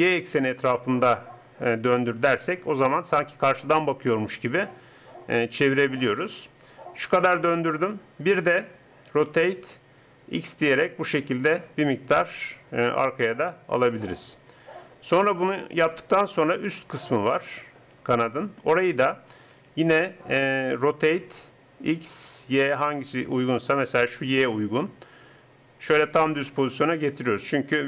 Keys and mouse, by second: 9.2 r, 19.5 r.